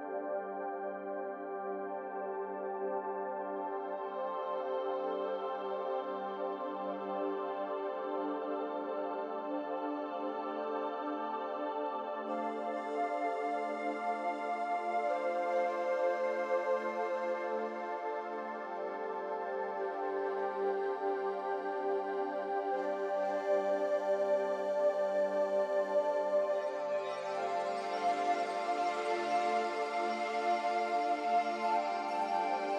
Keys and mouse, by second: 6.1 g, 7.7 Tab, 9.3 g, 15.6 click, 16.1-17.7 drag, 19.6-24.8 drag, 27.0 click, 28.5 click, 30.0 click.